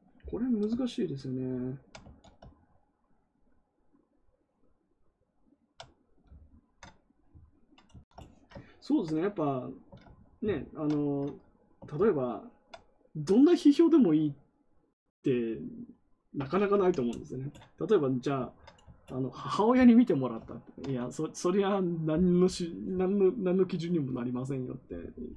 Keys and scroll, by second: 2.0 ctrl+z, 16.6 ctrl+w.